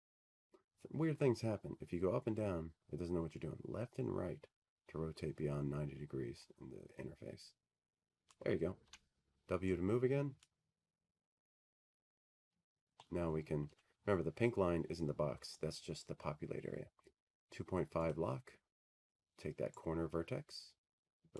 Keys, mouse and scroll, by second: 0.9 click, 13.8 click, 14.4 w, 17.1-18.0 scroll, 18.0-18.8 scroll, 19.4 click, 19.4 scroll.